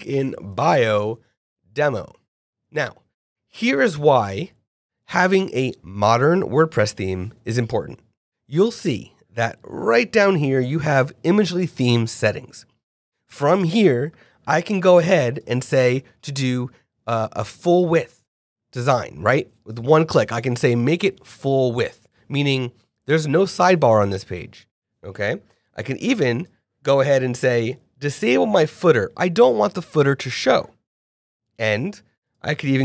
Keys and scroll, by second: 0.0-1.3 typing.